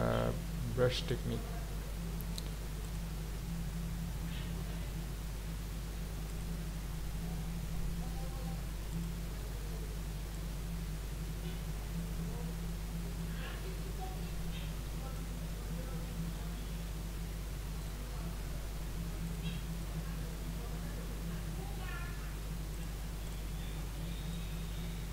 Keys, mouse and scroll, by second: 4.8-5.2 scroll down 3, 5.3 scroll up 2, 6.4-9.1 drag, 10.4-13.7 drag, 16.0 ctrl+z, 17.8 click, 19.3 click, 19.7 click, 22.7 click, 23.3 click, 24.3-25.1 drag.